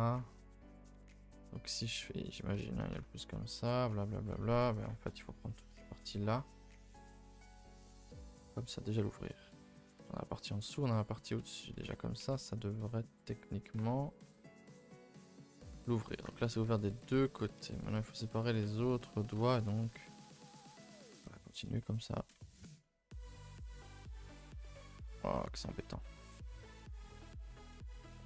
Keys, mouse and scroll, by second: 0.0 g, 1.4 g, 2.6 a, 2.7 a, 2.9 2, 3.1-4.4 middle drag, 4.4 2, 4.8 alt+click, 5.3 middle click, 5.6 scroll down 1, 5.8-7.4 middle drag, 7.4 right click, 7.6 a, 7.8 a, 7.8 middle click, 8.2 scroll down 2, 8.4-11.3 middle drag, 11.3 a, 11.4 a, 12.2 a, 14.7 u, 15.9 a, 16.1 a, 16.4 ctrl+z, 16.6 ctrl+z, 17.0 ctrl+z, 17.6-18.6 typing, 17.8 middle click, 18.9 middle click, 19.1-20.0 scroll up 3, 19.5 middle click, 20.0-21.5 middle drag, 21.5 shift+Left, 21.7 middle click, 22.5 alt+shift+Left, 22.8-24.0 middle drag, 24.0 alt+shift+Left, 24.4-25.4 shift+middle drag, 25.4 alt+shift+Left, 26.0 alt+shift+Left, 26.3 middle click, 27.1 alt+shift+click, 27.4 middle click, 28.1 alt+shift+click.